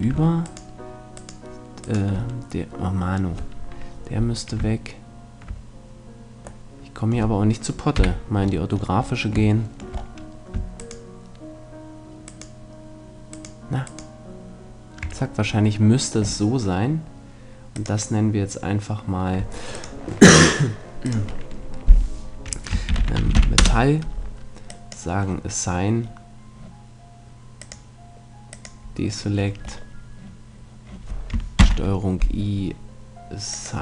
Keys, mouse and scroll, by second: 0.5-5.1 right drag, 8.0 KP_5, 10.8-15.7 right drag, 17.8-22.8 drag, 24.7 click, 25.6 middle click, 26.1 click, 27.6-29.9 drag, 29.9 right click, 30.4-31.6 middle drag, 31.6 ctrl+i, 33.5-33.8 drag.